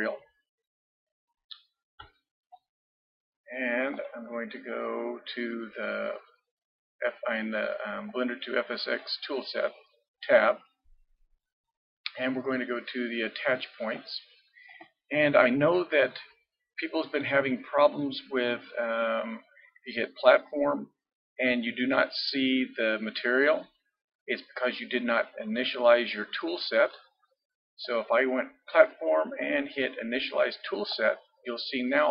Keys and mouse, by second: 3.9-10.0 drag, 10.0-14.0 middle drag, 14.0-15.7 drag, 15.7-20.3 middle drag, 20.3-22.1 drag, 22.1-24.7 middle drag, 24.7-26.4 drag, 30.9-32.1 drag.